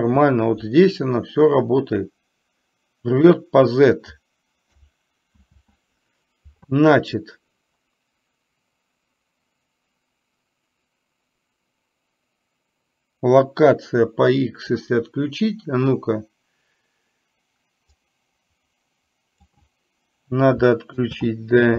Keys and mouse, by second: 0.0 ctrl+z, 1.6-3.4 drag, 5.5 ctrl+z, 18.0-19.5 drag, 21.1 ctrl+z.